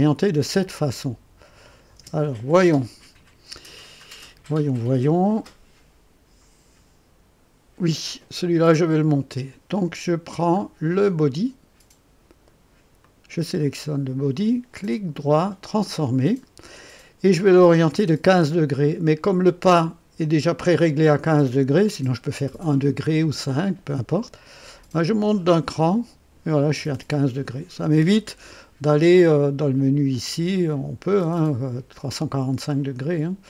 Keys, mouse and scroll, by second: 0.6 click, 1.6 click, 2.0 space, 8.8 click, 10.5 scroll up 1, 13.0 click, 14.8 right click, 15.8 click, 24.9-26.5 drag, 27.7 click, 30.0 click.